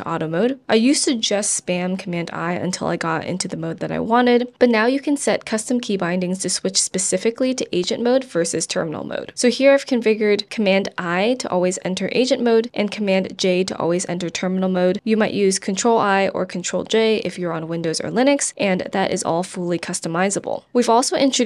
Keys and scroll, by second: 1.3 shift+super+i, 7.8 BackSpace, 12.1 super+j, 16.1 super+i, 16.5 super+j, 17.2 super+i, 17.9 super+j, 18.3 super+i, 18.8 super+j.